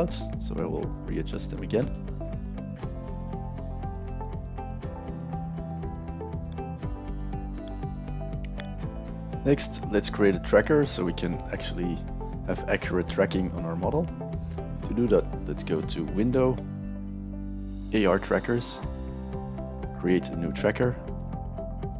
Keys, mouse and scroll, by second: 0.0-0.3 alt+drag, 0.5 alt+middle click, 0.9 alt+middle click, 1.4 alt+right drag, 3.5 click, 3.6 click, 3.7 shift+click, 3.8 click, 4.5 click, 5.1 click, 6.1 alt+right click, 6.2 alt+click, 7.1 click, 7.5 click, 15.1 click, 17.5 click, 19.4 click, 21.9 click.